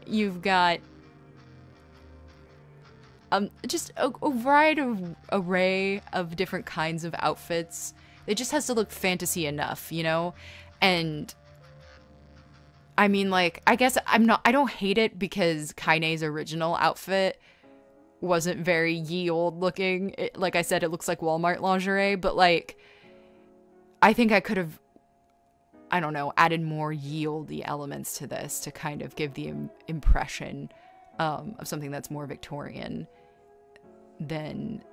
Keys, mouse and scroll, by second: 0.0-1.0 typing, 3.2 e, 3.6 scroll, 4.7 right click, 6.2 scroll, 9.2 space, 10.9 space, 11.9 space, 14.0 right click, 14.2 scroll, 14.7 space, 14.9 scroll, 16.3 space, 18.0 space, 18.3 right click, 19.6 b, 20.2 ctrl+z, 21.0-21.3 scroll, 23.1 right click, 23.3 scroll, 26.1 space, 26.8 space, 27.6 scroll, 27.8 space, 28.6 scroll, 28.8 space, 32.4-33.7 typing.